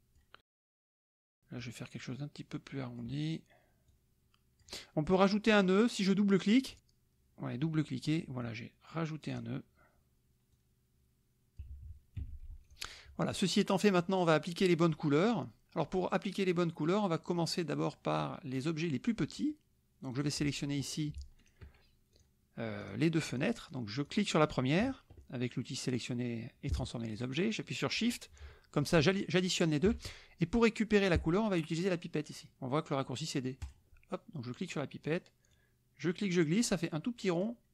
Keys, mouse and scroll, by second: 1.6-3.2 drag, 3.9 click, 6.6 click, 8.4-9.5 drag, 10.6-11.6 drag, 11.6 KP_Subtract, 12.3 F1, 12.8 click, 13.3 click, 15.0 click, 17.3 middle click, 18.0 middle click, 19.6 middle click, 20.1 click, 21.4 shift+click, 22.2 click, 22.8 click, 23.4 click, 24.0 click, 29.0 shift+click, 33.6 click, 35.5-37.6 drag.